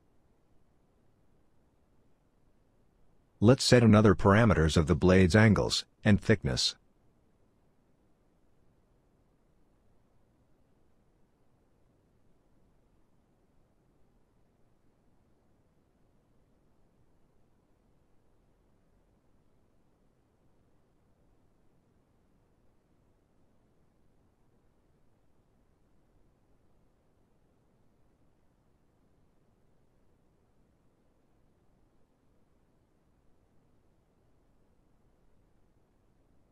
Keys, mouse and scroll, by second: 26.5 middle click, 27.2 right click, 32.5 right click.